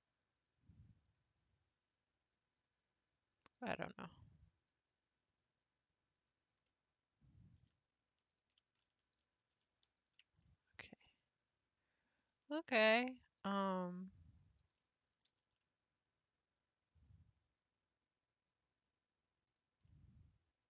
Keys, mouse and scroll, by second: 0.3 click, 1.2 scroll up 3, 2.5-3.5 drag, 3.5 click, 6.2 click, 6.7-8.3 middle drag, 8.3 shift+click, 9.1 ctrl+click, 10.0 ctrl+click, 10.4-12.2 middle drag, 12.2-12.7 scroll down 4, 12.7-14.4 middle drag, 14.4 scroll down 2, 14.8 middle click, 15.3 g, 19.9-20.6 middle drag.